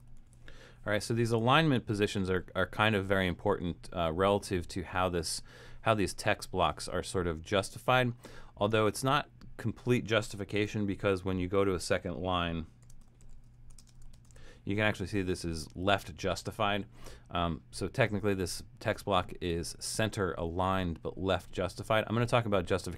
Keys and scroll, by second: 0.0-0.9 typing, 10.6 Return, 12.6-14.9 typing.